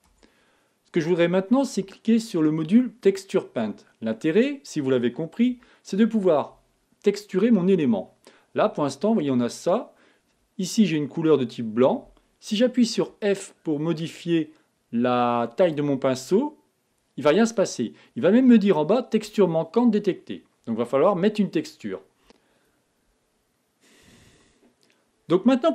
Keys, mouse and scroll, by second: 0.8 Tab, 3.6 click, 5.7 KP_1, 22.2 z.